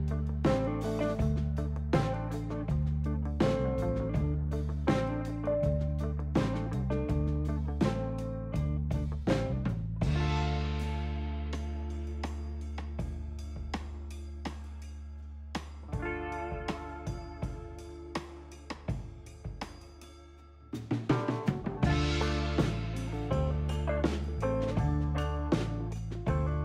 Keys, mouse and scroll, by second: 0.0 ctrl+z, 3.0 shift+s, 10.5 shift+s, 12.1 shift+s, 13.6 shift+s, 16.1 shift+s, 17.7 shift+s, 18.8 shift+s, 21.3 shift+s, 23.7 shift+s, 25.3 shift+s.